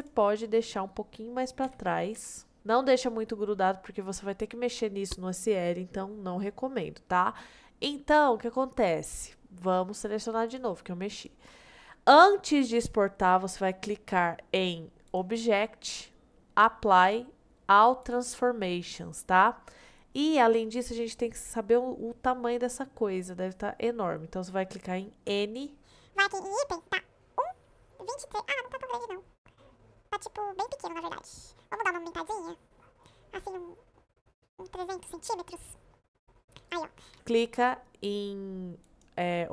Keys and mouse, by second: 0.4 middle click, 1.7 g, 2.2 y, 2.8-3.2 middle drag, 3.7-4.0 middle drag, 7.6-9.0 middle drag, 9.5-9.8 middle drag, 10.5-11.2 shift+drag, 11.6 middle click, 15.2-18.1 drag, 19.2 middle click, 25.3 n, 30.7-31.4 middle drag, 31.7 s, 37.1 q, 38.8-39.5 drag.